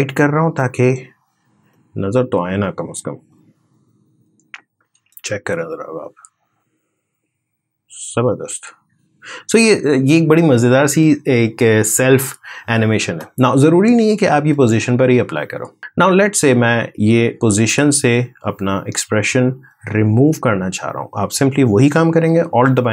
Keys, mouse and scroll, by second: 0.3 click, 4.9 space, 12.8 space, 14.3-19.4 alt+drag.